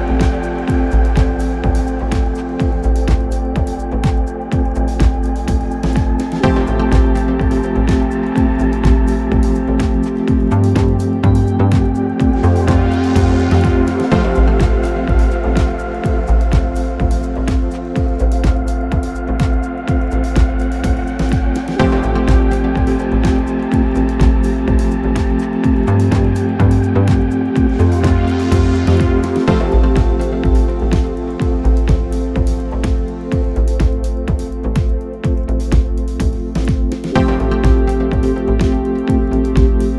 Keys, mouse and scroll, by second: 0.1-0.8 scroll down 1, 0.8 scroll down 2, 1.0 ctrl+right click, 1.9 ctrl+right click, 2.7 ctrl+right click, 3.5 ctrl+right click, 4.2 ctrl+right click, 5.1 ctrl+right click, 6.0 ctrl+right click, 9.1 ctrl+right click, 11.0 click, 12.2-13.0 scroll down 2, 13.0 drag, 16.5 click, 17.2-20.3 drag, 23.1 click, 27.2 click, 28.4 click, 29.5 click, 31.3-33.7 ctrl+drag, 35.0-38.8 drag, 39.2-39.9 middle drag.